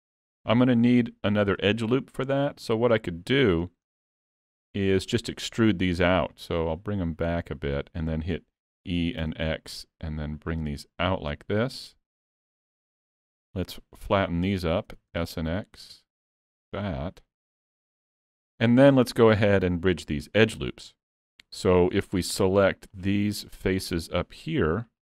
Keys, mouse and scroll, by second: 3.5 scroll down 2, 3.9 middle click, 6.4 click, 8.9 e, 18.8 middle click, 19.8-20.2 scroll up 2, 20.5 middle click, 22.9 click.